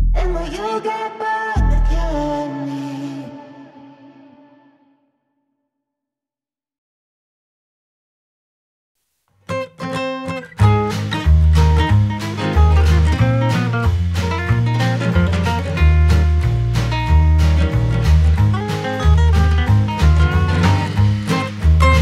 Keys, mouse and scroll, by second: 0.1 space, 1.3 Left, 2.1 ctrl+Tab, 5.3 click, 5.9 click, 7.9-8.7 drag, 10.7 ctrl+p, 12.7 space, 14.9 drag, 16.0 space, 16.7 click, 17.0 n, 18.6-20.0 drag, 20.0 n, 21.4 n.